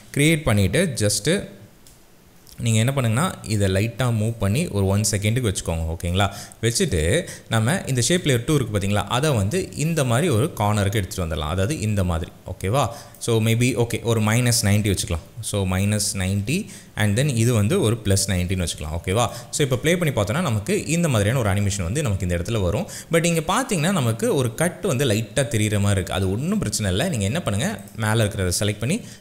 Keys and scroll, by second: 15.3 KP_Subtract, 15.7 KP_9, 16.0 KP_0, 16.3 Return, 18.2 KP_9, 18.4 KP_0, 18.7 Return, 19.6 space.